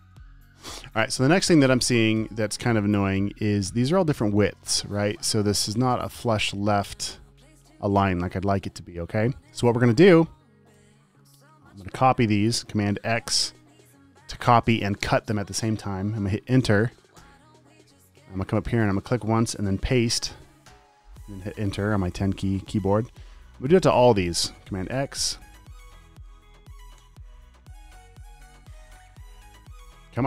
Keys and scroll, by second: 11.1 t, 13.3 super+x, 20.2 super+v, 25.0 super+x, 26.8 super+v, 28.4 super+a, 28.7 super+v.